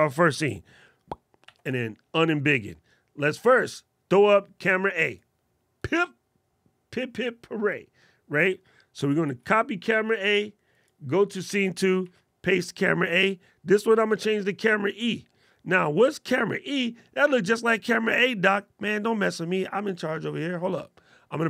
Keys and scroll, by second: 8.9 super+c, 11.7 super+v.